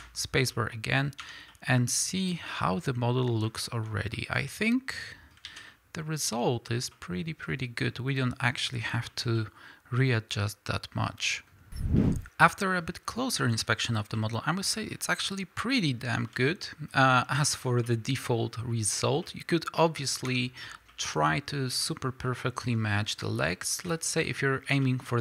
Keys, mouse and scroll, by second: 1.2 Tab, 2.2-2.7 scroll up 2, 4.0 scroll down 1, 5.5 alt+a, 12.0-17.4 shift+middle drag, 14.9 scroll up 2, 15.8-16.1 scroll up 2, 17.4 scroll up 2, 17.5-25.2 middle drag, 18.9 scroll down 2, 20.2 Tab, 25.0 scroll down 3.